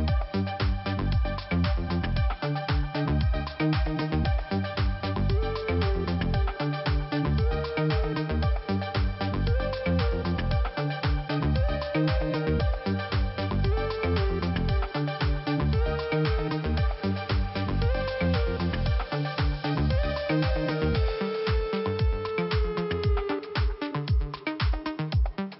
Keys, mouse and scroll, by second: 1.8 click, 1.9 click, 2.3 right click, 2.4 right click, 3.4 right click, 5.3 click, 5.5 click, 7.0 click, 10.7 right click, 10.8 right click, 11.3 click, 11.4 click, 11.4 right click, 11.6 click, 12.9 click, 13.0 click, 13.7 click, 15.6 click, 16.9 click, 17.0 click, 17.9 click, 19.8 click, 20.9 click, 22.8-23.1 scroll up 2, 25.5 click.